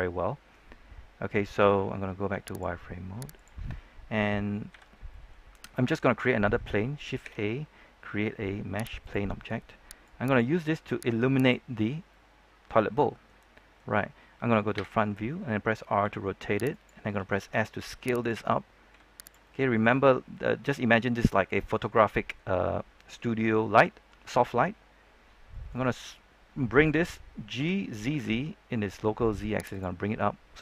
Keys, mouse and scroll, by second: 3.6-4.1 scroll down 1, 4.1-4.6 scroll up 1, 4.6 z, 5.0 middle click, 5.4 scroll down 1, 5.7 middle click, 7.2 shift+a, 8.9 click, 12.0-14.5 middle drag, 14.7 KP_1, 15.9 r, 16.6 click, 17.4 typing, 18.8 typing, 19.1 click, 19.4-21.1 middle drag, 21.5 scroll down 1, 21.8 middle click, 23.3 scroll up 1, 23.5-24.7 middle drag, 26.3-27.5 scroll down 1, 27.5-28.0 typing, 29.6 click, 29.9 scroll down 1, 30.1 middle click.